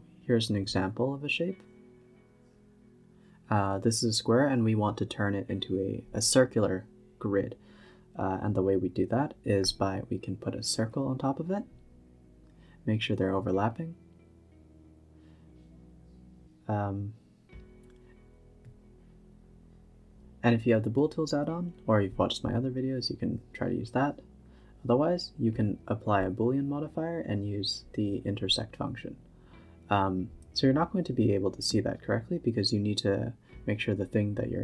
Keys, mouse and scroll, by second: 0.0 a, 0.5 click, 1.7 shift+a, 2.1 scroll down 1, 2.2 g, 3.9 s, 6.3-8.4 drag, 8.4 Tab, 8.9 Tab, 9.0-9.4 scroll up 2, 9.4 s, 9.8 g, 11.9-12.4 middle drag, 12.4 g, 14.2 shift+click, 15.0-16.8 middle drag, 16.8 click, 17.5 click, 18.6-19.8 drag, 19.8 Tab, 20.1 Tab, 21.6-22.8 drag, 24.7-26.0 drag, 26.0-26.8 middle drag, 26.8 click, 27.3 h, 27.6 middle click, 28.2 ctrl+z, 28.6 middle drag, 28.8 Tab, 29.3 e, 30.1 Tab, 30.5 g, 31.8 z, 32.2 click, 32.6-34.0 middle drag, 34.0 click, 34.4 click.